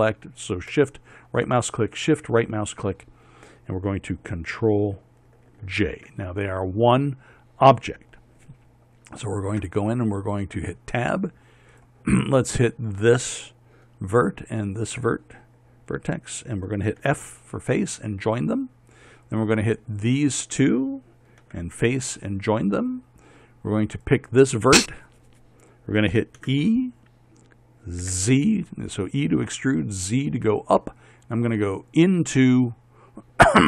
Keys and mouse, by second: 6.2 ctrl+j, 10.1 Tab, 12.2-13.3 drag, 17.5 f, 22.0 f, 26.9 e.